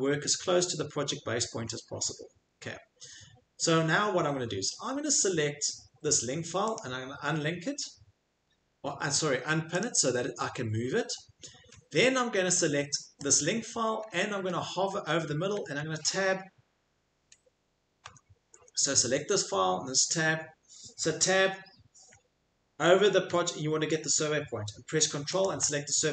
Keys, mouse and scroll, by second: 0.1 middle click, 0.3 scroll, 0.4 middle click, 1.6 middle click, 1.8 middle click, 2.1 middle click, 3.2 middle click, 3.3 middle click, 6.7 click, 8.1 middle click, 9.8 click, 11.2 middle click, 12.4 Escape, 12.7 Escape, 14.2 ctrl+scroll, 14.4 ctrl+middle click, 14.8 ctrl+scroll, 14.9 ctrl+middle click, 15.1 middle click, 17.8 ctrl+scroll, 18.0 Escape, 18.9-20.3 click, 21.2 Tab, 25.4 ctrl+click.